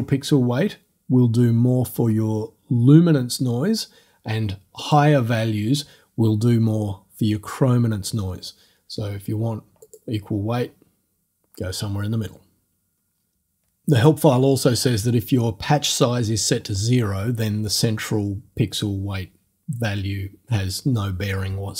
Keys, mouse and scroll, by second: 4.8 click, 9.8 click.